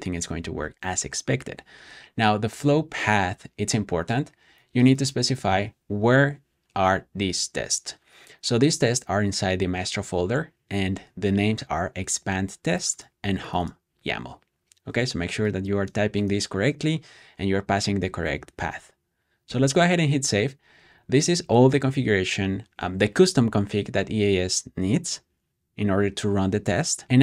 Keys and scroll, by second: 19.3 super+s.